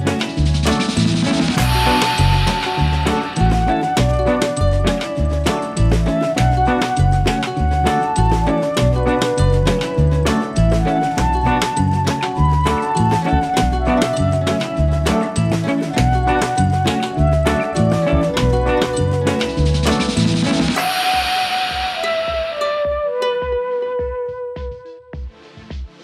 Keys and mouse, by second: 0.3 g, 0.8 click, 2.2 shift+click, 4.2 click, 7.8 click, 8.2 space, 8.5 click, 8.5 space, 9.6 i, 10.6 click, 12.1 alt+BackSpace, 13.2 space, 13.6 click, 13.7 space, 14.1 v, 15.8 click, 19.9 click, 21.8 click, 22.5 [.